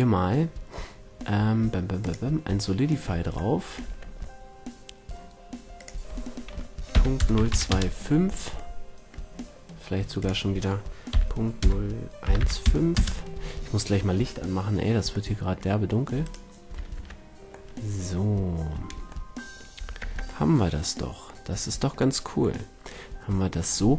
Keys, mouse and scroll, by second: 2.3-3.7 middle drag, 3.7 Tab, 4.2-5.7 middle drag, 5.7-7.5 drag, 8.7-10.1 middle drag, 10.1-12.1 drag, 15.3 middle click, 16.1 right click, 16.9 Tab, 17.6-19.5 middle drag, 19.5 middle click, 19.7 a, 19.9 Tab, 20.4 middle click, 20.6 middle drag, 20.8 middle drag, 21.0 middle drag, 21.4 middle click, 23.4-23.9 middle drag.